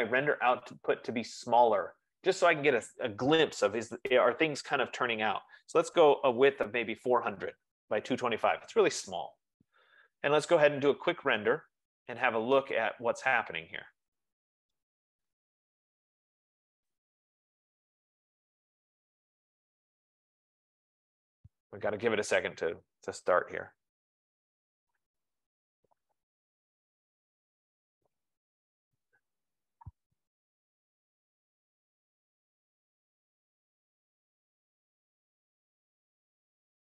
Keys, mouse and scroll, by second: 2.3 click, 5.9 click, 5.9-6.8 typing, 10.8 click, 12.7-15.8 drag, 20.9-25.8 drag.